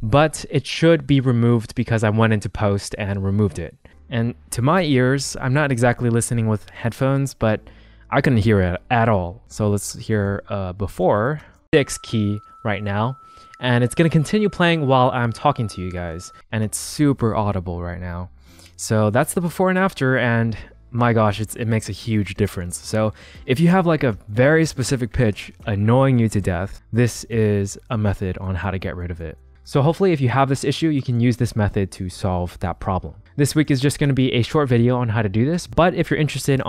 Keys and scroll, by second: 9.6 super+z, 11.5 space, 16.4 space.